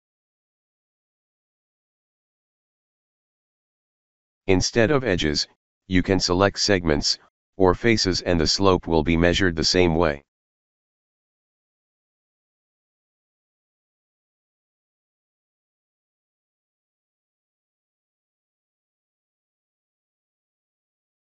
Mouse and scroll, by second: 4.8 click, 5.2 shift+middle click, 6.1 scroll up 2, 6.2 middle click, 6.9 click, 7.1 ctrl+middle click, 7.3 middle click, 7.5 middle click, 9.1 click, 10.0 alt+middle click, 13.3 click, 14.0 middle click, 14.2 middle click, 14.8 ctrl+click, 16.3 click, 17.0-17.8 alt+middle drag, 18.5 click, 19.1 click.